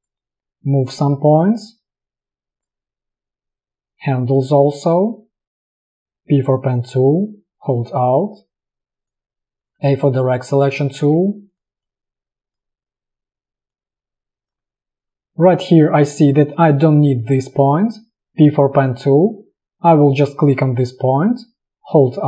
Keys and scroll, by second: 5.8 space, 6.1 p, 9.6 a, 11.1 a, 17.9 p.